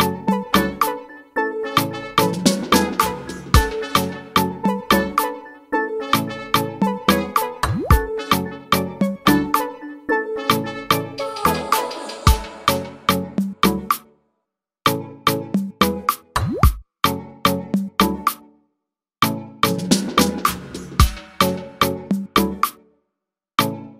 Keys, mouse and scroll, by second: 0.9 click, 1.6 click, 1.9-3.1 right drag, 3.1 click, 6.4 shift+d, 7.7 click, 10.5 click, 11.0 click, 11.5-12.5 scroll up 1, 13.2 click, 13.8-14.3 scroll down 1, 15.9 click, 17.4 click, 17.8 click, 21.0 click, 21.8 click.